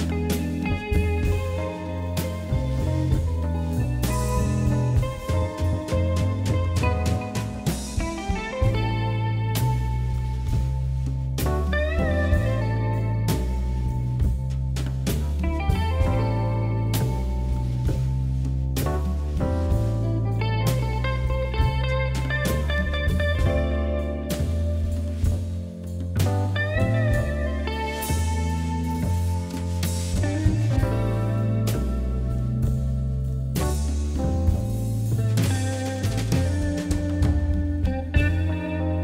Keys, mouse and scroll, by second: 1.1 Delete, 2.4 ctrl+a, 2.8 click, 3.7 ctrl+z, 4.5 ctrl+z, 6.7 click, 7.5-10.4 typing, 11.7 g, 13.7-14.8 shift+middle drag, 14.8 s, 15.9 s, 17.3 g, 18.6 scroll up 3, 18.8-19.5 shift+middle drag, 19.5 s, 21.1 g, 24.5-24.8 scroll down 1, 24.8-25.6 middle drag, 25.6 KP_3, 25.8 KP_1, 26.4 g, 28.0 KP_7, 28.8 shift+z, 30.0 shift+z, 30.3-30.7 scroll down 1, 30.7 KP_1, 31.9-33.4 shift+middle drag, 34.7 click, 35.0 KP_1, 35.1 click, 35.9 ctrl+2, 36.5 Tab, 36.7 middle click, 37.7 ctrl+r.